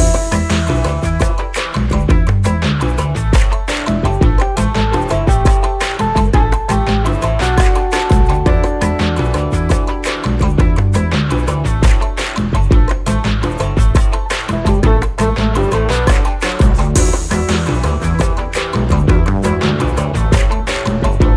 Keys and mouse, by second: 1.9 click, 10.8 click, 14.1-14.9 alt+drag, 16.9-17.9 shift+drag.